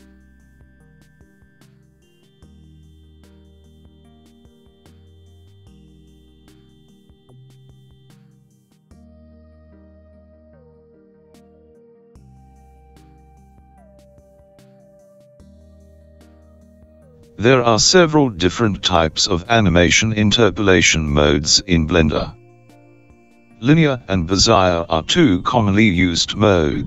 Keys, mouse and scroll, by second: 4.1 s, 11.8 i, 18.0 t.